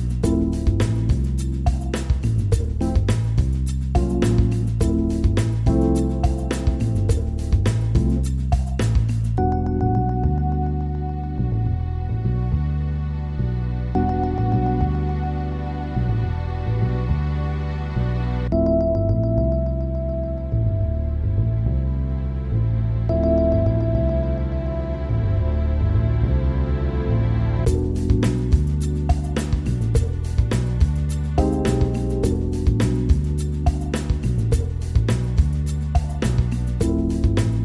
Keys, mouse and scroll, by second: 1.4 click, 3.2-3.7 drag, 4.4-7.3 drag, 9.9 shift+a, 15.3 click, 16.6-18.7 right drag, 18.7 s, 22.0 click, 23.7 s, 25.5 scroll up 4, 25.7-26.4 middle drag, 26.4 scroll down 2, 26.6-27.4 middle drag, 27.4 scroll up 1, 27.5-28.0 scroll down 2, 28.0 `, 28.9-29.6 scroll up 5, 29.3 shift+middle click, 29.7-30.1 scroll down 3, 30.1-31.9 shift+middle drag, 31.9 click, 32.8-35.9 drag.